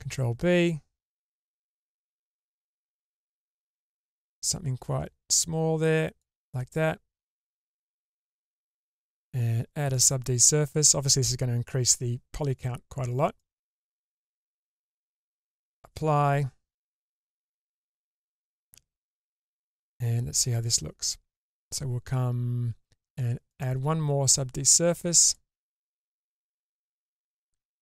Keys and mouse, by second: 0.0 ctrl+b, 6.8-8.4 middle drag, 8.4 Tab, 8.7-10.4 drag, 13.3 click, 14.8-15.6 drag, 17.2-17.7 middle drag, 18.1 Tab, 20.7 Tab, 23.6-27.8 drag.